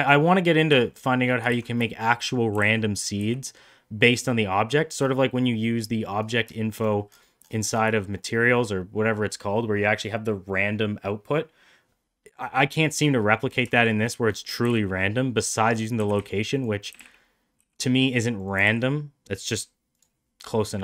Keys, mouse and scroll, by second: 1.0 middle drag, 1.6 ctrl+z, 1.9 shift+middle click, 2.2 middle click, 2.6 g, 6.0 middle click, 6.7 shift+middle drag, 8.1 shift+middle click, 13.4 middle click, 13.8 shift+middle click, 14.0 middle click, 14.3 click, 14.7 g, 16.0 g, 18.6 g.